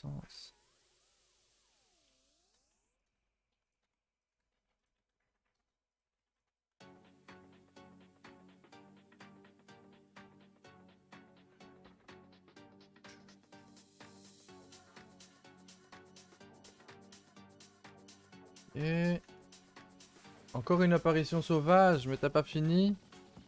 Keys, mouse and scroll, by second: 1.7 g, 2.3 e, 3.8 r, 4.3 g, 5.0 s, 6.1 g, 6.5 r, 8.0 r, 8.6 g, 10.4 e, 11.9 r, 12.9 s, 14.2 r, 15.2-17.4 typing, 17.7 Tab, 18.8 click, 18.9 a, 19.1 a, 19.7 click.